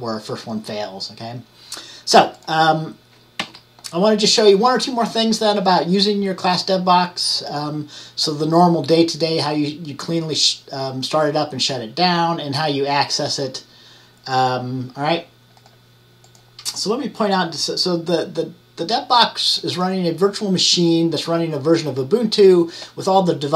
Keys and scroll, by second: 3.5 Right.